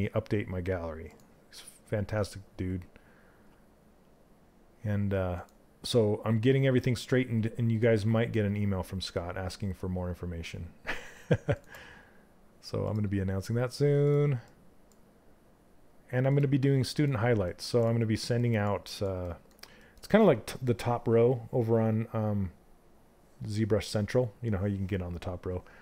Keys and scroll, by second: 3.0 space.